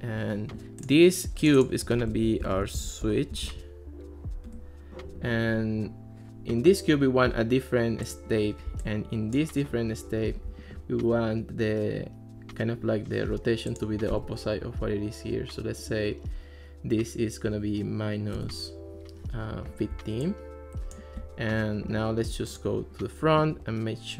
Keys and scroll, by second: 2.3-4.0 typing, 4.5 Return, 14.7 Left, 17.5 -, 18.4 Return.